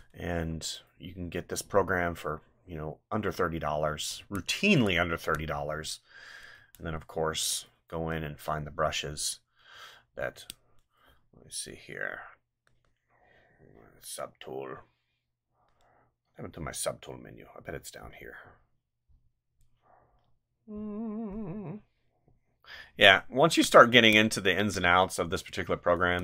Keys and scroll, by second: 4.2 space, 6.5 space, 9.7 ctrl+z, 23.9 space, 26.0 space.